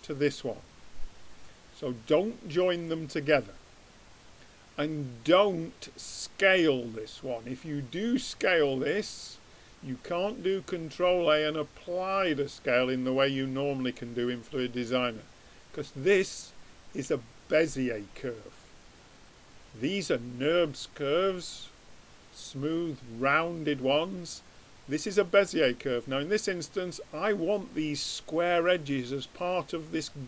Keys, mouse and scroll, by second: 0.3-2.1 drag, 2.3-4.0 drag, 19.7-21.4 drag, 24.3-26.1 drag, 26.1-30.2 middle drag.